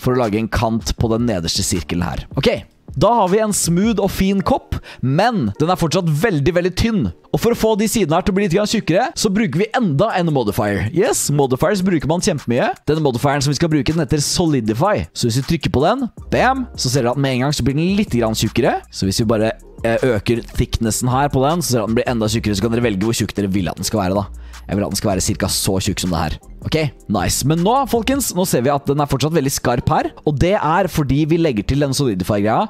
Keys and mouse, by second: 2.1 middle click, 2.3 Tab, 2.6 click, 2.9-3.3 drag, 3.4 shift+drag, 3.8 drag, 4.1 middle click, 4.5-5.4 middle drag, 5.5-6.5 drag, 6.8 shift+drag, 12.8-16.2 drag, 19.6-25.4 drag, 25.7-26.9 middle drag, 27.0 middle click, 27.7 shift+middle drag.